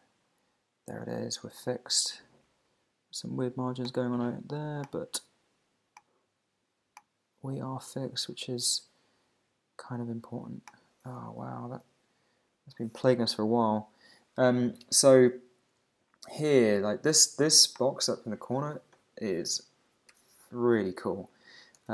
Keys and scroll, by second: 11.4 alt+super+i, 21.8 shift+2.